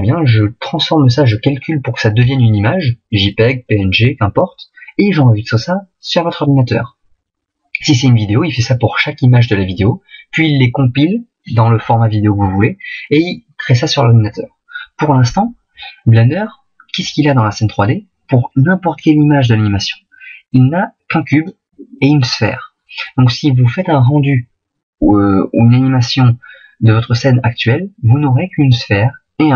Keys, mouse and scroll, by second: 19.0 click.